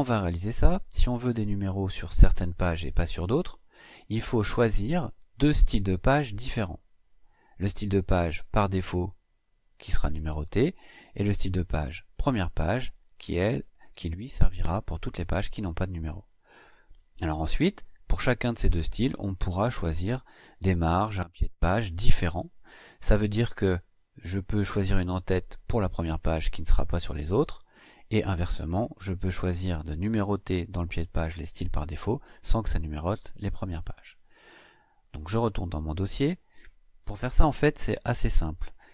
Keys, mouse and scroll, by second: 35.3 click.